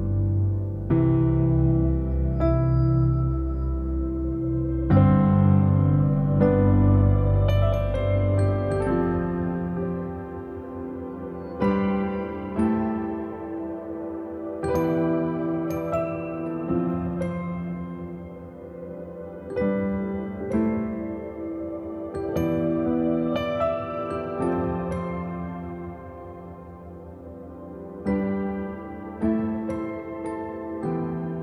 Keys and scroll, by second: 1.9 ctrl+i, 10.2 ctrl+x, 10.8 ctrl+z.